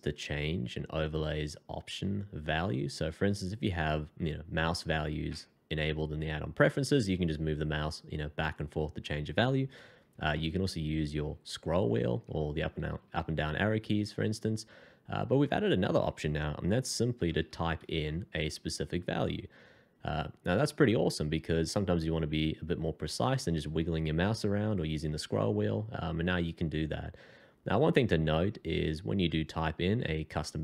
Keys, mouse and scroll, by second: 10.1 scroll down 1, 10.7 scroll up 1, 11.1 scroll down 1, 11.4 scroll up 1, 12.4 Up, 12.5 Up, 12.7 Up, 12.9 Down, 13.0 Down, 13.2 Down, 13.4 Up, 17.3 1, 17.5 5, 17.8 0.